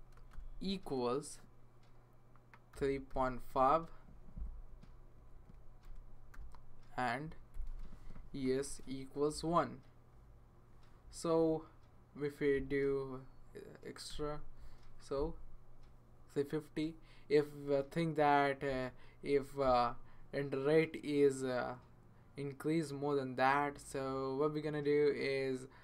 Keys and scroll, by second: 0.1-0.9 typing, 2.1-4.0 typing, 4.7 Right, 4.9 Right, 5.0 Right, 5.2 Right, 7.5 Left, 7.7 space, 8.4 Right, 9.3 1, 14.1 0, 19.6 ,.